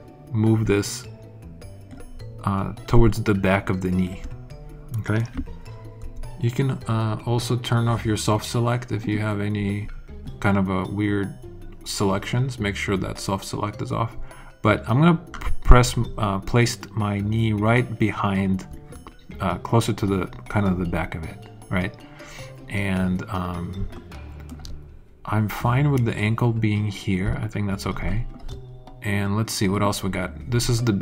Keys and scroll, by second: 5.9 b.